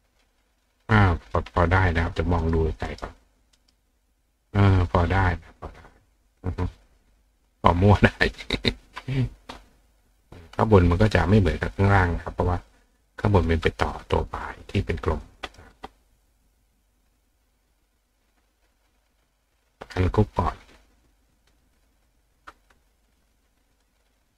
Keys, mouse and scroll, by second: 2.1 click, 2.4 right click, 2.9 right click, 3.6 right click, 4.7 click, 6.0 click, 14.8 click, 16.4 click, 17.1 click, 17.6 click, 18.1 click, 19.0 click, 19.6 click, 21.1 click, 21.7 click, 22.1 click.